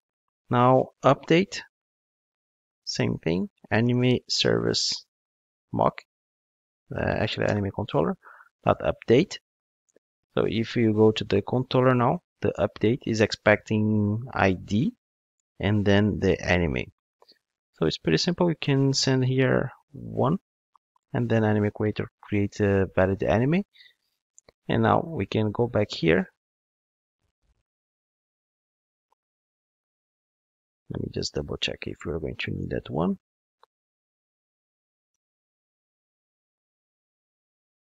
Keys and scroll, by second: 7.5 Return, 32.6 super+/, 33.8 ctrl+shift+d.